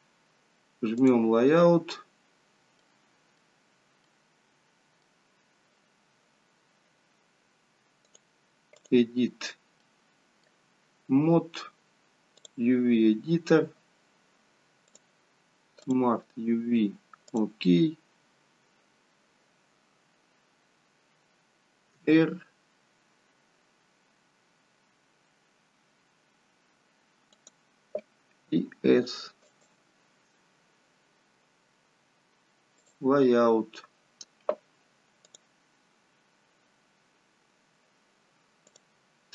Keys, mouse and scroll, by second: 1.3 click, 2.3-2.9 scroll up 1, 2.9 middle click, 2.9-3.6 scroll up 2, 3.6-4.1 scroll down 2, 4.1 middle click, 8.1 click, 9.9 middle click, 33.1 click, 37.0 click, 37.0-38.3 scroll down 1, 38.3 scroll down 1, 38.7 click.